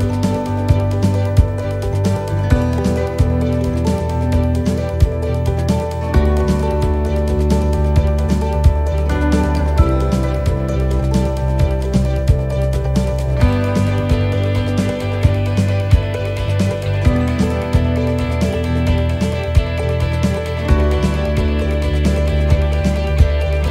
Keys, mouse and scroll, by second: 1.6 ctrl+r, 5.3 ctrl+r, 10.5 ctrl+r, 13.2 ctrl+z, 15.2 ctrl+r, 20.2 click, 21.1 right click, 22.2 c.